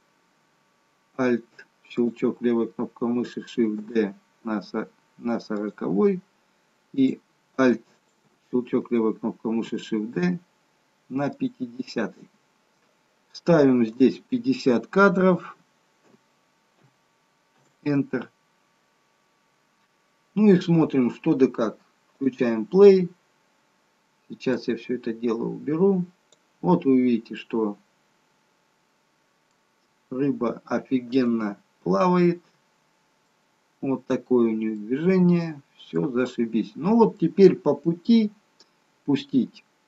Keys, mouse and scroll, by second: 2.0 alt+click, 3.8 shift+d, 7.0 click, 8.0 alt+click, 9.6 shift+d, 14.0 click, 22.2 click, 24.8 click, 27.4 middle click, 30.1 z, 32.1 middle click, 34.9 middle click, 37.2 middle click.